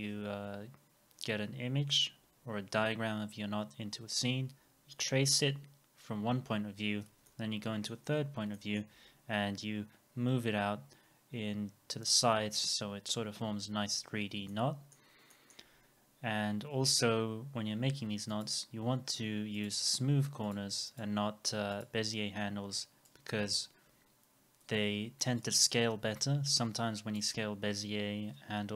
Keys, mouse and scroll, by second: 7.3 alt+middle click, 8.6 alt+middle click, 14.5 alt+middle click, 15.3 alt+middle click, 15.7 scroll up 1, 20.9 double click, 24.7 r.